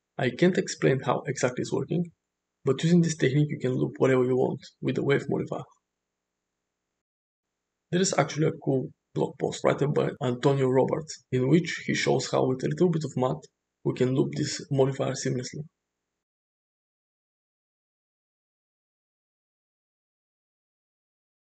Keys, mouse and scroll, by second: 3.1-8.7 drag, 11.7-14.2 drag, 12.9 0, 14.7 Left, 17.2 shift+Right, 18.8 click, 21.0 Right.